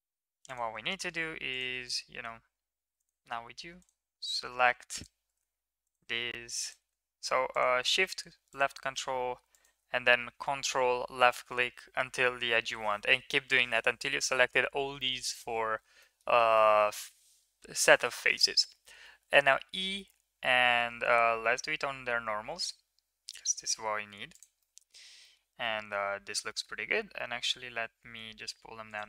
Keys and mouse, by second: 0.0 3, 3.8 ctrl+click, 4.9 shift+click, 8.5 shift+click, 9.5 ctrl+click, 16.2 middle click, 16.7 middle click, 19.4 e, 24.7 middle click, 25.2 middle click, 25.7 middle click.